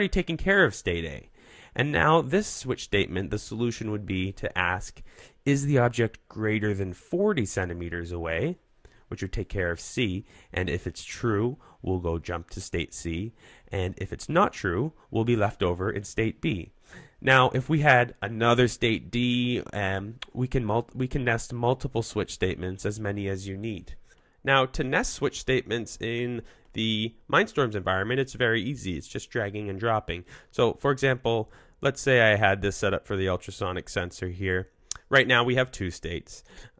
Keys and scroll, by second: 23.8 super+z.